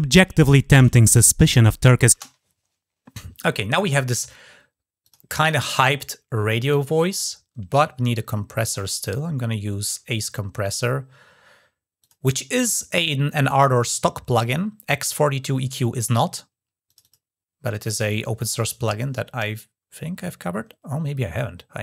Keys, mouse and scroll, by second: 4.8 click, 6.4 right click, 11.8 click, 12.3-13.0 scroll down 2, 13.0 scroll down 1, 16.6 click, 16.8 click.